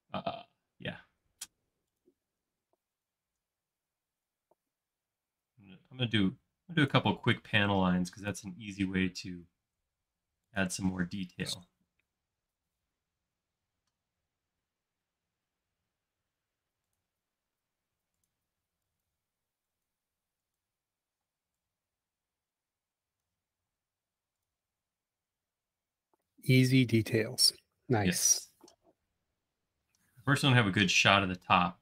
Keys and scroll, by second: 1.6 typing, 3.8 shift+f, 7.3 l, 11.0 shift+space, 12.6 l, 18.5 e, 21.2 p, 23.8 space.